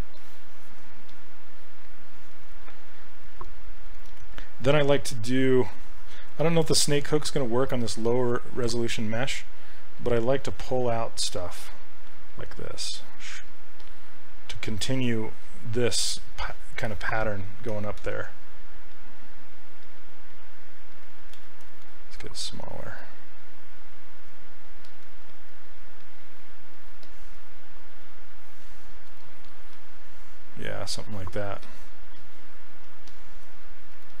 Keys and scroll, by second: 4.1 s, 7.2 s, 17.7 ctrl+z, 18.0 ctrl+z, 22.4 s, 25.3 s.